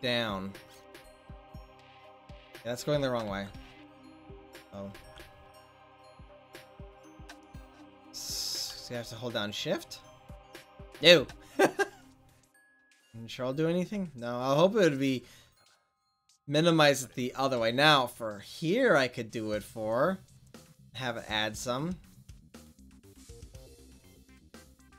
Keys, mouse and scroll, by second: 3.6 ctrl+z, 5.3 ctrl+z, 8.2 click, 18.0-19.8 drag, 22.5-23.5 drag.